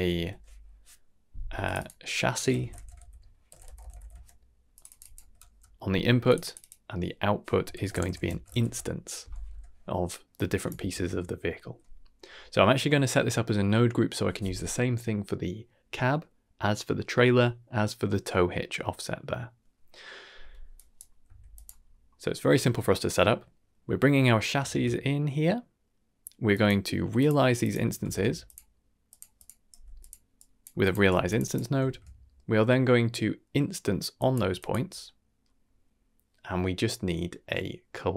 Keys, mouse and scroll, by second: 1.7-4.0 drag, 3.7 BackSpace, 4.7 click, 4.8 click, 6.2 click, 6.4 click, 6.5-8.6 drag, 9.4 n, 10.3-10.6 drag, 10.7 ctrl+x, 20.7 drag, 21.2 s, 21.7-22.3 scroll down 3, 22.1 middle click, 22.8 scroll up 2, 23.0 middle click, 24.6 shift+a, 27.8 x, 28.0 shift+a, 29.7 g, 30.3 drag, 30.7 click, 31.1 g, 31.2 click, 31.4 click, 31.8 shift+a, 35.0-35.4 middle drag.